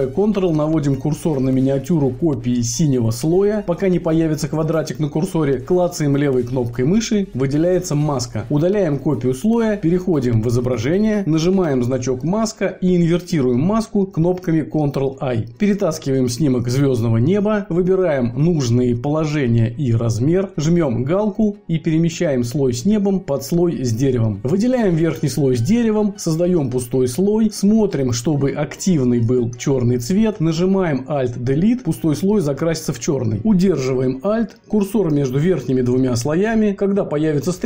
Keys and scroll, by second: 14.9 ctrl+i, 33.0 alt+Delete.